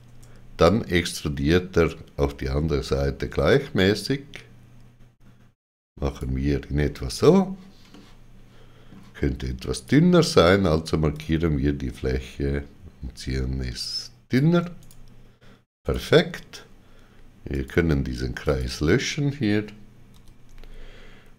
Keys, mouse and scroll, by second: 0.0 Tab, 7.1 right click, 7.8 middle click, 9.7 click, 11.1 click, 14.8 right click, 15.8 right click, 17.5 click, 18.4 click, 20.1 x.